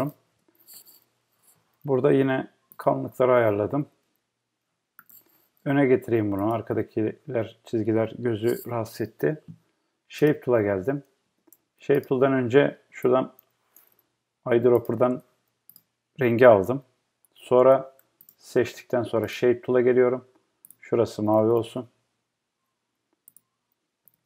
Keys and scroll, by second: 11.3 Escape.